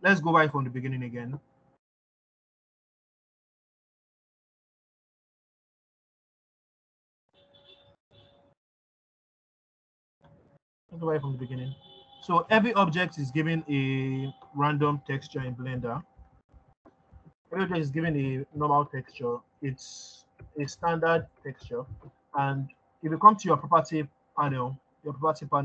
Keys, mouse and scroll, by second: 0.9-5.2 drag, 5.8 click, 17.0 click, 21.1 ctrl+z.